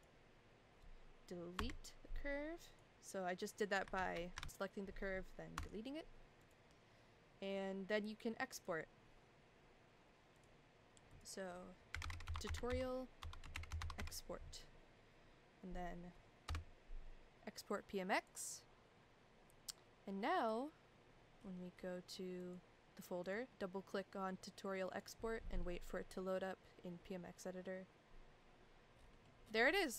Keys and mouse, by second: 1.5 Delete, 2.7 click, 3.9 ctrl+z, 4.4 ctrl+z, 4.4 click, 5.5 Delete, 6.4 click, 8.6 drag.